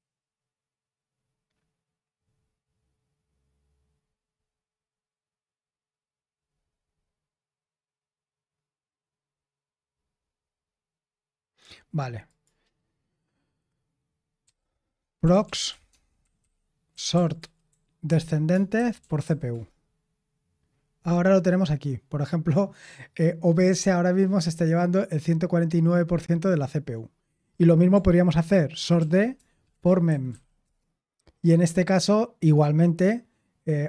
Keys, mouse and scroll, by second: 9.4-10.0 scroll up 1, 10.0-11.4 scroll up 1, 11.4-12.2 scroll up 1, 12.2-14.4 scroll up 1, 14.4-19.7 typing, 27.2 q, 28.9 ctrl+p, 29.3-31.0 typing.